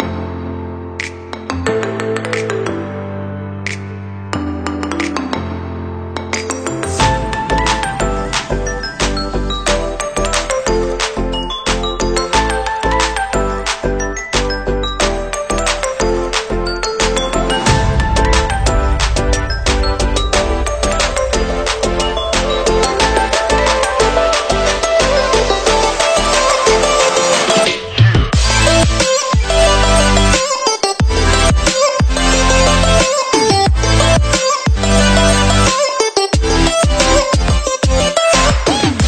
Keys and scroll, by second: 36.1 Delete, 37.7 ctrl+Delete.